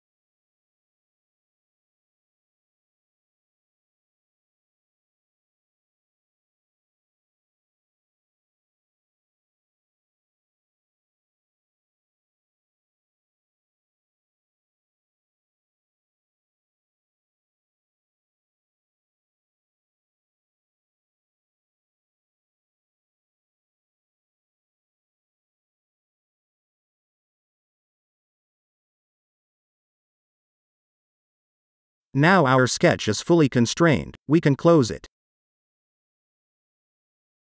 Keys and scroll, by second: 0.7 t, 1.3 Return, 4.8 Return, 8.5 Return, 11.7 Return, 17.8-19.7 typing, 20.8 Return, 26.2-27.6 typing, 34.9 0.